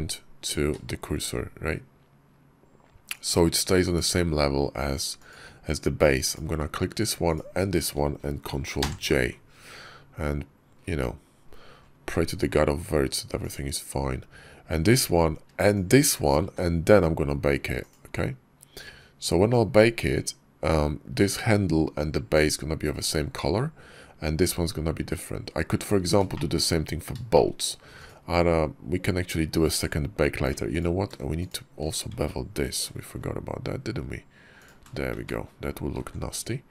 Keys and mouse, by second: 3.7 click, 5.0 click, 8.7 ctrl+j, 10.1 KP_5, 13.3 click, 17.6 click, 26.2 shift+click, 27.2 shift+click, 27.8 click, 29.5 Tab, 30.6 alt+click, 31.3 alt+shift+click, 32.7 ctrl+shift+b, 35.0 Tab, 36.0 alt+x.